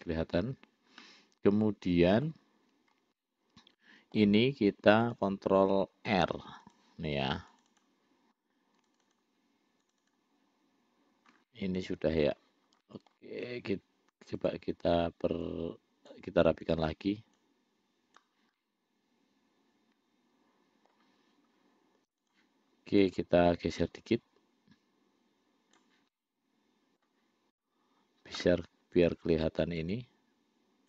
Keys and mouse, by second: 1.2-2.6 middle drag, 3.4-4.5 middle drag, 5.2 click, 6.9 click, 7.8 click, 8.1 click, 9.2 shift+click, 9.4-10.4 shift+drag, 11.7 middle click, 13.1 middle click, 14.6 click, 15.7 click, 16.9 click, 17.7 click, 18.9-21.2 middle drag, 22.4 click, 24.3-26.1 drag, 26.4 middle click, 29.3 click, 30.1-30.8 drag.